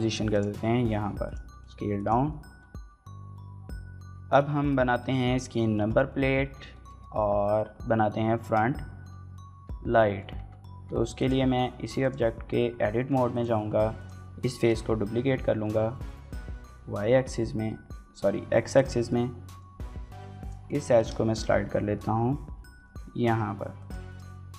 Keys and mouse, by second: 0.1 click, 0.5-3.3 typing, 1.1 click, 1.9 click, 2.1 middle click, 2.3 shift+middle click, 3.2 middle click, 3.4 Tab, 3.5 shift+middle click, 3.7 shift+middle click, 3.9 shift+middle click, 4.4 shift+middle click, 4.6 middle drag, 5.5 shift+middle click, 5.9-6.4 middle drag, 6.5 shift+middle click, 6.8 middle drag, 8.2 shift+middle click, 9.3 Tab, 9.8 Tab, 11.0 Tab, 11.0 click, 12.8 Tab, 12.8 middle click, 13.1 click, 13.6 3, 14.3 shift+d, 16.3 y, 17.6 x, 18.6 click, 18.9 middle click, 19.8 2, 20.3 click, 20.5 middle click, 20.8 g, 20.8 x, 22.3 y, 23.6 click, 23.9 shift+middle click, 24.1 middle click.